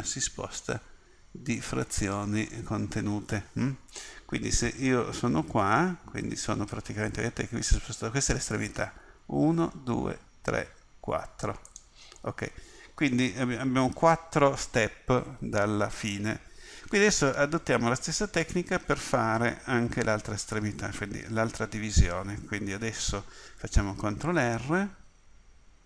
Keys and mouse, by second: 12.3-14.0 middle drag, 24.2 ctrl+r.